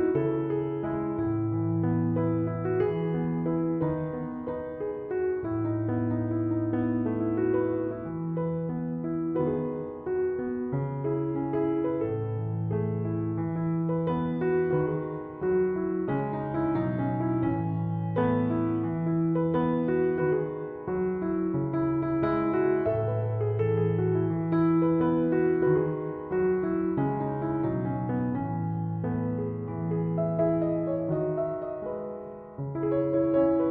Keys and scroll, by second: 8.2 0, 8.4 Return, 26.1 2, 26.4 Return.